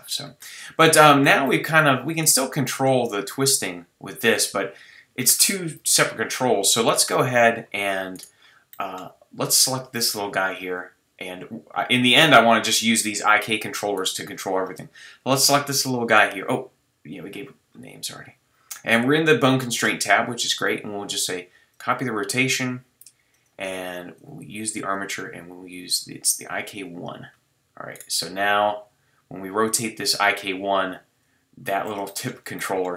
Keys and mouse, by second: 0.1-2.2 middle drag, 3.3-3.8 middle drag, 4.1 middle click, 4.2-5.2 drag, 5.9 super+z, 6.9-9.0 drag, 26.8-28.0 middle drag, 29.6 middle click, 29.9-30.9 middle drag, 31.3-32.2 middle drag.